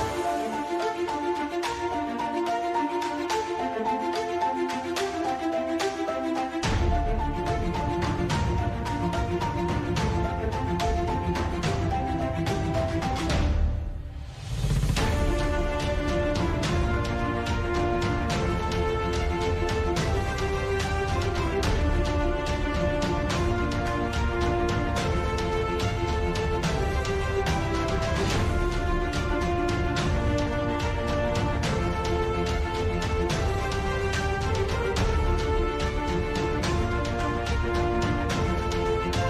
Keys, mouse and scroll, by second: 0.2 middle drag, 1.0-2.2 drag, 2.2 middle click, 3.2 click, 3.8 middle click, 4.2-7.6 drag, 8.5 click, 10.5-11.7 drag, 12.5-13.1 drag, 13.8-17.9 drag, 17.9 KP_Divide, 19.0 KP_5, 19.4 a, 19.5 ctrl+s, 20.4 middle click, 21.6 shift+s, 24.3 KP_Divide, 24.5 KP_Divide, 24.7 KP_5, 24.8 KP_1, 25.1 KP_3, 25.3 KP_Divide, 26.1 shift+a, 27.6 e, 28.0 e, 29.2 e, 30.0 e, 30.7 right click, 31.2 click, 31.5-32.6 right drag, 32.0 e, 32.7 e, 34.5 e, 36.3 click, 36.7 e, 36.8 click, 37.0 ctrl+z, 37.4 e, 39.0 Tab.